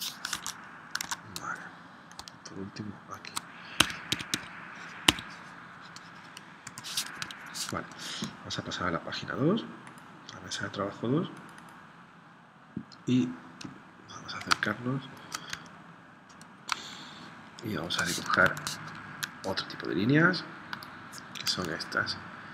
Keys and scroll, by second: 0.4 super+Tab, 1.1 super+Tab, 3.8 Escape, 5.1 Escape, 6.8 v, 7.1 Escape, 14.6 space, 16.8 space, 18.5 super+Tab.